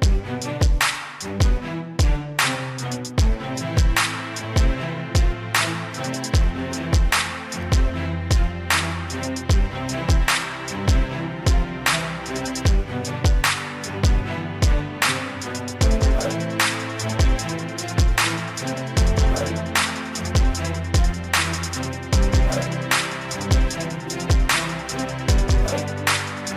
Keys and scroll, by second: 17.3 ctrl+j, 17.6 ctrl+j, 17.8 ctrl+j, 18.5 ctrl+j, 19.0 ctrl+j, 19.5 ctrl+j, 20.5 ctrl+j.